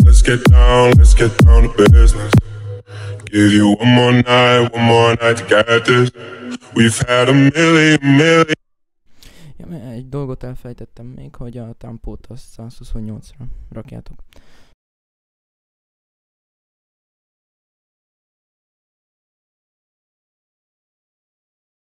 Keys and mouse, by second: 1.9 right click, 11.7 F1, 12.0 F1.